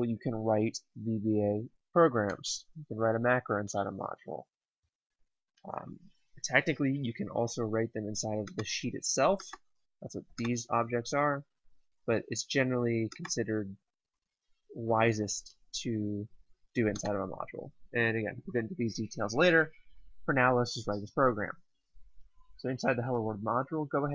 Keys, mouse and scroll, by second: 8.4 click, 12.9 click, 16.7 click.